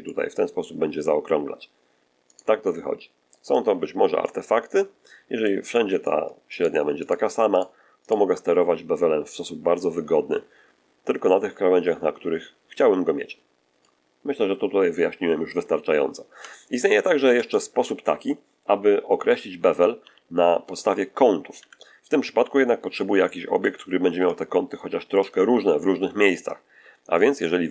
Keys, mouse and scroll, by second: 0.0-1.2 middle drag, 2.2 right click, 3.5 click, 4.6 middle click, 5.6 middle click, 6.4 shift+right click, 7.0 shift+right click, 7.5 shift+right click, 8.0 shift+right click, 9.3-13.9 drag, 16.2 Tab, 17.3 click, 17.3 x, 19.9 n, 20.6-21.0 scroll down 1, 21.5 1, 22.8 scroll down 1, 23.2-23.7 shift+middle drag, 24.0 shift+a, 25.2 click.